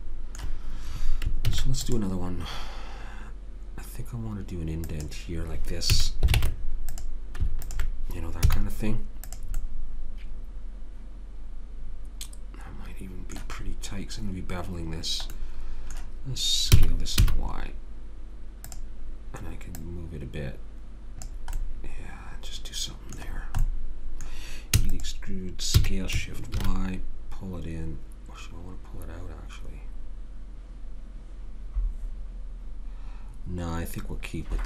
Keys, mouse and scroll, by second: 1.5 ctrl+r, 5.9 a, 6.4 ctrl+Tab, 8.4 z, 9.8 middle click, 13.7-16.8 middle drag, 16.8 s, 19.8 click, 24.8 e, 25.8 s.